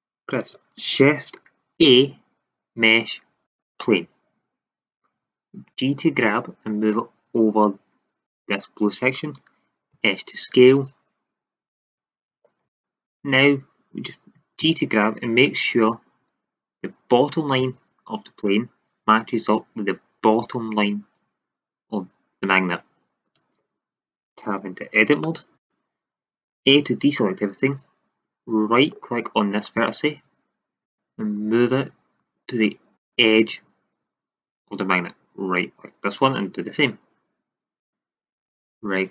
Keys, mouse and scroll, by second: 1.7 shift+a, 5.6 g, 8.3-10.1 drag, 9.9 s, 12.8 middle click, 14.6 g, 18.5 click, 24.4 Tab, 25.2 middle drag, 26.5 a, 31.4-32.6 drag, 35.4-36.6 right drag, 36.6-37.1 drag, 37.5 click.